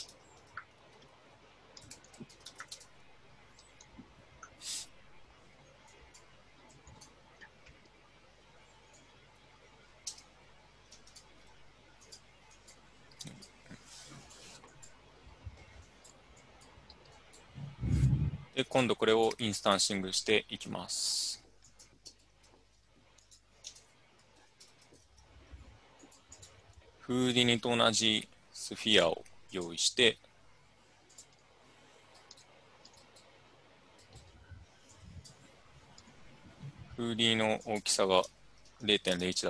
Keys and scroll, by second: 0.0-3.2 typing, 5.1 typing, 10.2 Tab, 11.0 n, 13.8 typing, 22.1 Tab, 23.7-25.6 typing, 38.9 ctrl+c.